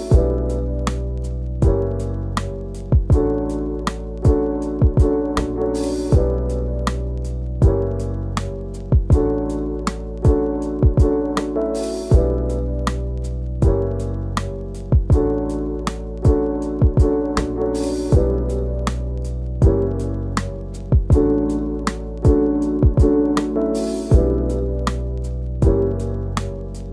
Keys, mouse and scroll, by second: 0.8 scroll up 2, 1.0 scroll down 1, 1.1 middle click, 1.5 scroll down 1, 1.7 middle click, 2.3 scroll up 1, 2.5 scroll down 2, 2.6 middle click, 3.0 click, 3.2 Tab, 3.3 click, 3.3 scroll down 1, 3.6-5.5 shift+middle drag, 5.5-6.0 scroll down 4, 6.0 middle click, 6.6-7.0 scroll up 1, 7.0 scroll down 1, 7.5-8.1 shift+middle drag, 8.1 scroll down 2, 8.3 shift+middle click, 8.4 scroll up 2, 8.6 click, 9.0 KP_Decimal, 9.3-9.6 scroll up 2, 9.5 shift+middle click, 9.8 middle click, 10.6-12.3 scroll down 4, 12.3-13.0 scroll down 6, 13.0-13.6 shift+middle drag, 13.9-15.0 scroll up 2, 14.0-14.4 middle drag, 15.0-17.6 scroll up 1, 17.6 scroll down 1, 17.8 middle click, 18.0-18.6 scroll up 2, 18.3 shift+middle drag, 18.6 click, 18.8 Tab, 19.1 click, 20.7-21.0 scroll up 1, 21.0-22.4 drag, 22.4 shift+d, 22.8 shift+d, 22.9-23.3 scroll down 1, 23.3 scroll up 1, 24.0-25.0 e, 25.6 scroll down 1, 25.8 middle click, 25.9-26.3 scroll up 2, 26.3 click, 26.7 e.